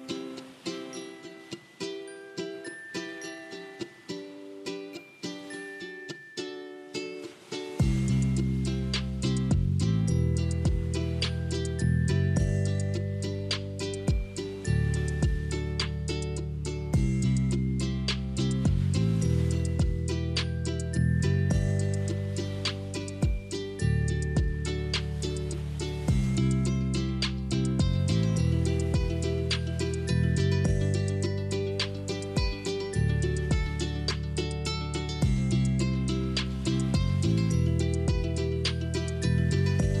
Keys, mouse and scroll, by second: 0.7-3.0 middle drag, 3.0 click, 3.4 scroll up 3, 4.5 click, 8.7 click, 10.5 click, 10.8 middle click, 11.3 scroll down 1, 12.0-13.0 scroll down 4, 13.0-16.0 middle drag, 16.9-18.1 middle drag, 18.1 click, 19.3 shift+click, 19.8 shift+click, 20.3 shift+click, 20.5 shift+click, 20.9 shift+click, 22.2 ctrl+c, 23.3 shift+click, 24.3 ctrl+v, 24.8 click, 26.1-28.2 ctrl+middle drag, 28.2-29.5 scroll up 3, 29.5 click, 31.8 r, 35.0-38.1 middle drag, 38.1 scroll up 2, 38.9-40.0 shift+middle drag.